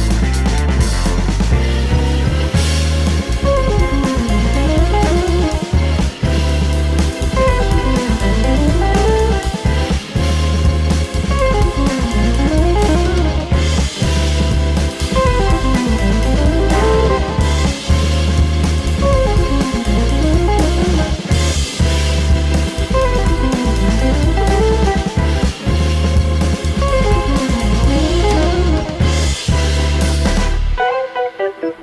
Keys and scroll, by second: 11.3 scroll down 1, 16.0 super+d, 19.0 super+d, 19.2 super+d, 19.3 super+d, 26.2 super+d, 28.0 d, 29.0 super+c, 29.2 super+v, 31.5 super+v.